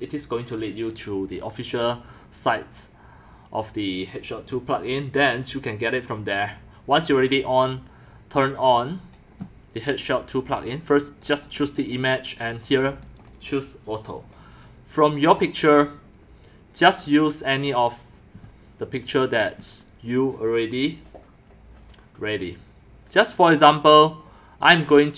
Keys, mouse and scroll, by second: 4.1-5.8 drag, 6.2 click, 11.5 click, 11.7 click, 12.0 click, 12.5 click, 12.7 click, 13.0 click, 13.3 click, 14.3-17.0 drag, 18.2-22.6 drag, 25.0-25.1 drag.